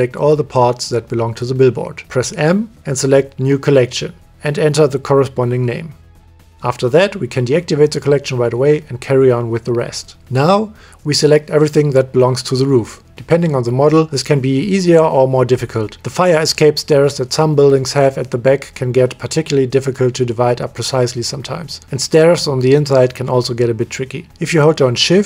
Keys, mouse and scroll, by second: 1.8 m, 3.6 shift+middle click, 4.6 l, 10.5 click, 15.7-18.5 drag, 20.4 g, 22.1-23.4 middle drag.